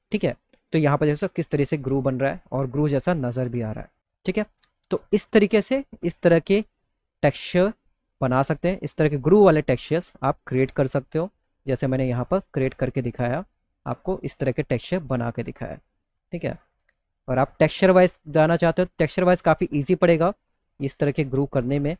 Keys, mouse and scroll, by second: 0.2 middle click, 0.5 middle click, 1.6 middle click, 4.1 middle click, 5.4 middle click, 6.0 middle click, 7.3 middle click, 8.1 click, 9.3 middle click, 10.2 click, 11.1 middle click, 12.3-15.7 drag, 16.0 middle click, 17.4 click, 18.4 middle click, 19.6-21.1 drag.